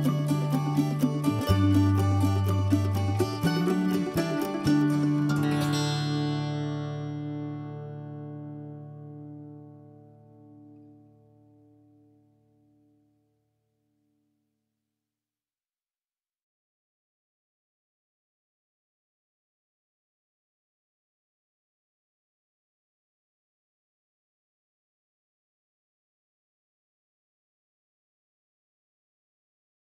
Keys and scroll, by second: 0.8 ctrl+h, 1.8 ctrl+h, 3.6 s, 6.3-8.4 typing, 17.7 s, 29.2 m.